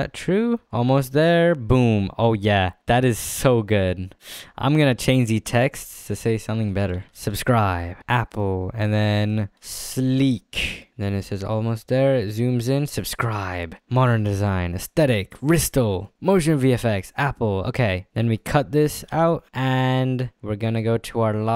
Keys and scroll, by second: 7.0-8.0 typing, 9.6 l, 9.9 e, 10.1 k, 18.6 s, 19.0 f.